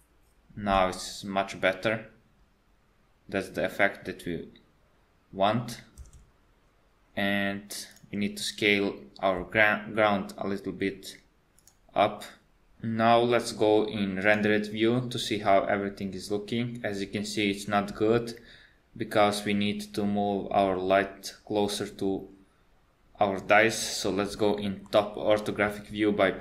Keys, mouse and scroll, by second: 6.1 space, 7.9 click, 9.4 s, 14.3 click, 24.9 KP_7.